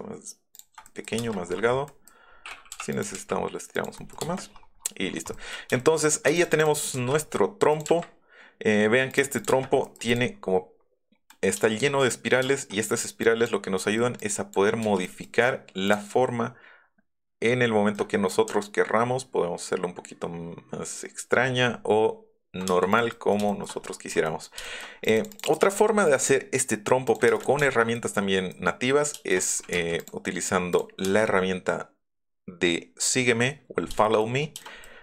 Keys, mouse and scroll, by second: 1.2 space, 2.9 click, 3.1 Up, 3.7 click, 4.3 space, 4.5 middle click, 4.8 middle click, 5.0 middle click, 5.3 middle click, 5.8 shift+middle click, 6.3 click, 6.5 click, 6.6 click, 6.8 click, 7.1 m, 7.7 click, 7.8 Up, 9.1 click, 9.4 click, 9.5 space, 10.1 click, 11.3-12.4 shift+middle drag, 12.9 middle click, 14.0 middle click, 14.1 click, 15.0 click, 15.0 s, 15.8 click, 16.0 1, 17.9 ctrl+click, 22.6 space, 22.9 click, 23.1 shift+middle click, 24.2 click, 24.6 shift+click, 25.1 click, 25.3 click, 25.4 click, 26.1 click, 27.0 click, 27.3 click, 27.3 space, 27.6 shift+middle click, 29.7 r, 29.9 click, 30.7 click, 31.0 space, 34.0 shift+middle click, 34.6 click.